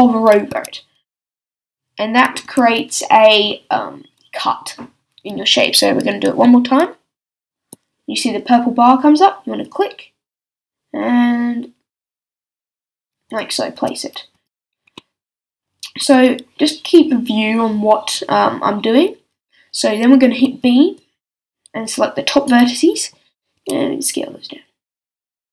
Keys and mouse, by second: 0.5 z, 1.3 z, 2.4 a, 7.3 ctrl+r, 13.4-16.0 drag, 13.8 z, 14.3 z, 16.0 a, 20.4 b, 23.6 s, 25.3-25.5 drag.